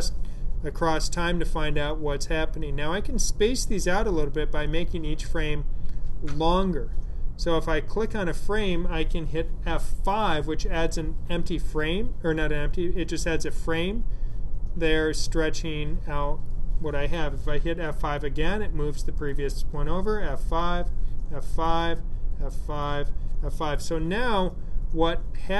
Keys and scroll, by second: 10.1 F5, 17.9 F5, 19.8 F5, 20.9 F5, 22.0 F5, 22.9 F5.